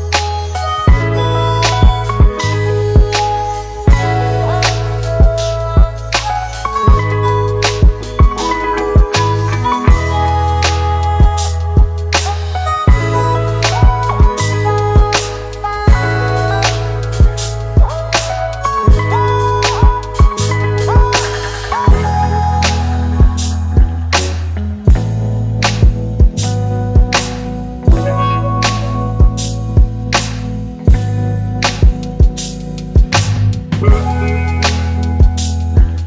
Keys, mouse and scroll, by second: 19.5 double click.